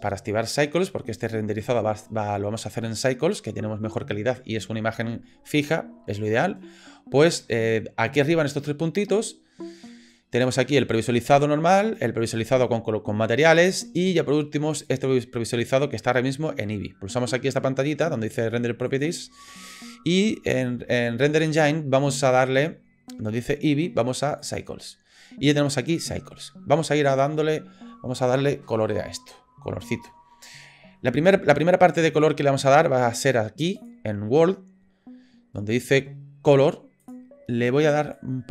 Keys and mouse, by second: 10.4 click, 11.9 click, 14.8 click, 19.0-24.6 drag, 33.8 click, 37.0 click.